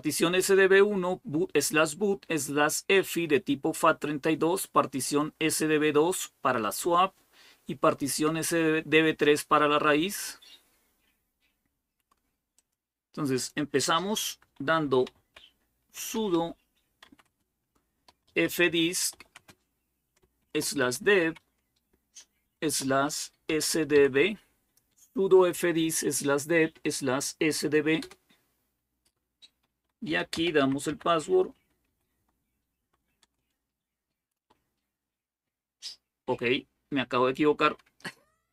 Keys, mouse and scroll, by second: 12.3-13.9 drag, 14.9-24.2 typing, 27.8 Return, 29.2-32.5 typing, 33.0 Return.